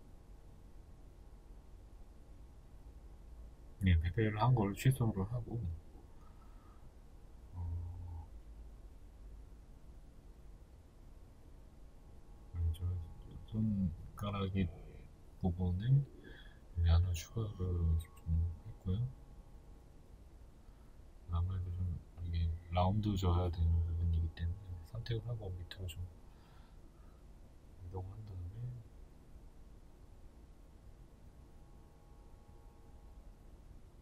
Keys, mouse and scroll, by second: 1.2 ctrl+z, 5.5 right click, 6.2 ctrl+r, 8.1 s, 10.7 click, 11.0-14.6 shift+middle drag, 12.2-12.5 scroll, 14.6 right click, 15.2 ctrl+r, 16.9 s, 23.5 alt+right click, 24.5 f, 27.0 click, 27.3 middle click, 28.2 right click, 28.6 middle click, 29.5 alt+right click, 30.1 alt+right click, 30.2 alt+right click, 30.7-31.8 alt+right drag, 31.8 middle click, 32.6 alt+shift+right click, 33.2-34.0 middle drag.